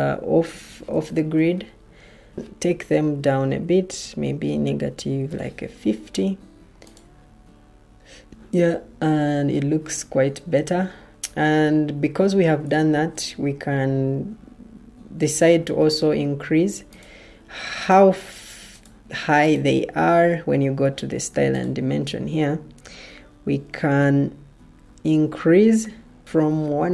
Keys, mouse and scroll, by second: 0.8 ctrl+t, 4.7-5.2 typing, 12.8 ctrl+t.